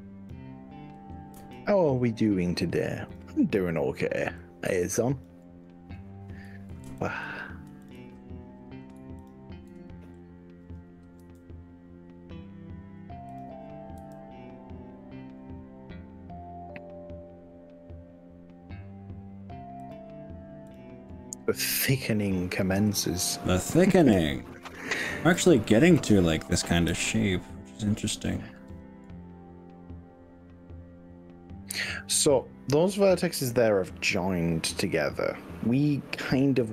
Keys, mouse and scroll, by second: 1.4 s, 3.1 click, 4.5 click, 7.0 ctrl+click, 7.8 ctrl+click, 8.3 scroll up 3, 9.3 shift+click, 10.1-10.4 scroll down 3, 11.3 s, 13.3 click, 14.0 g, 19.9 click, 20.7 click, 21.7 g, 24.1 click, 24.9 click, 26.1 click, 26.9 g.